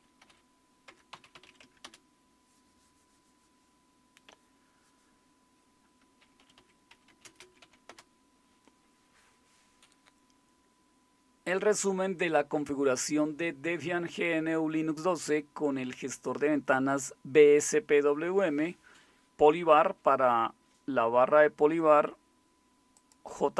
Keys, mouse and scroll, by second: 0.3-1.9 typing, 6.1-8.1 typing.